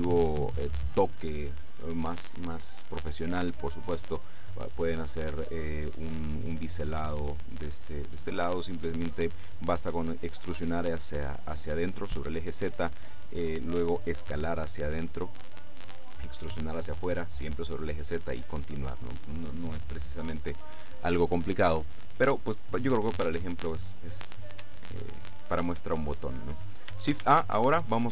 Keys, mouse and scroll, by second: 24.9-26.5 shift+middle drag, 27.4 shift+a.